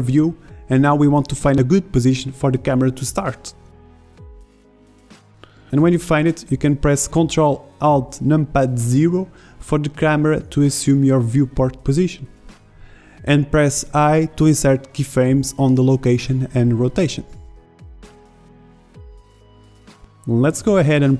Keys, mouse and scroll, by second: 0.0-6.0 middle drag, 13.1 ctrl+alt+KP_0, 14.7 ctrl+i, 16.1 i, 20.2 i.